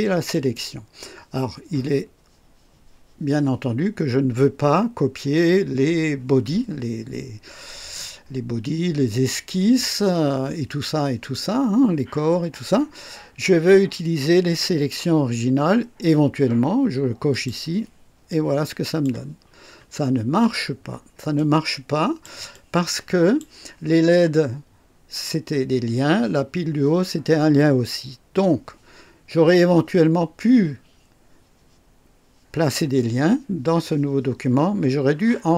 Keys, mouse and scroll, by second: 0.3 click, 17.3 click, 18.3 click, 19.4 scroll up 1, 20.8 scroll down 1, 21.3-22.4 drag, 22.5-23.5 drag.